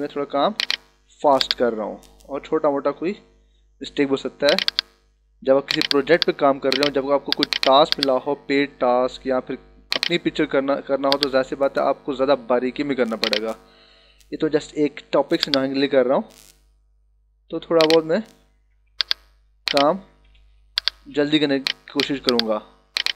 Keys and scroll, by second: 14.3 [, 18.6 ], 20.7 h, 22.1 b.